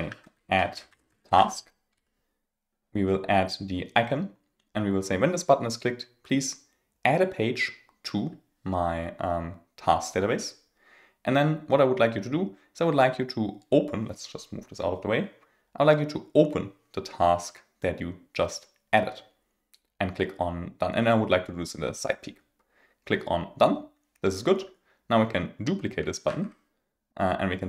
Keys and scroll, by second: 26.2 super+d.